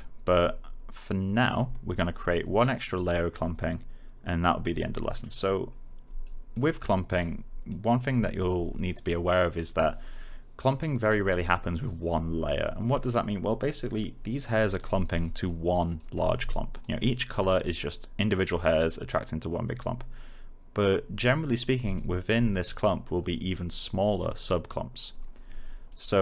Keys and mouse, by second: 0.3 alt+click, 6.0 alt+click, 6.4 alt+middle click, 6.8 alt+right click, 7.8 alt+middle click, 14.8 alt+middle click, 15.6 alt+right click, 16.5 click, 21.9 alt+right click, 25.4 alt+right click.